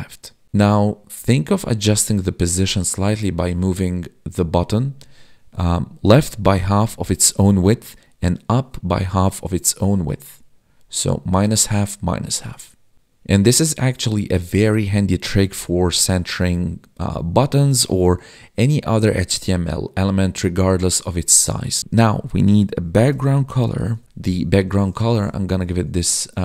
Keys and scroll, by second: 24.3 Tab.